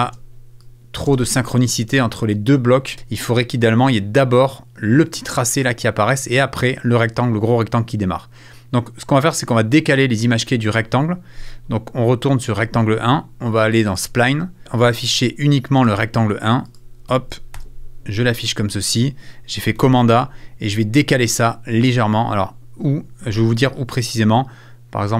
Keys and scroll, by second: 2.2 space, 17.1 super+a, 17.6 super+f, 19.8 super+a, 20.8 a.